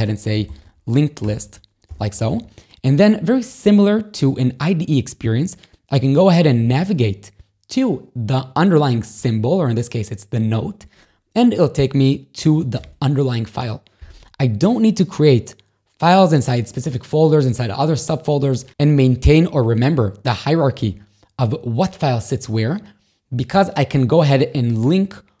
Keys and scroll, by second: 0.0 i, 1.2 d, 1.3 Return, 1.9 j, 2.9 b, 6.7 ctrl+], 12.8 ctrl+o.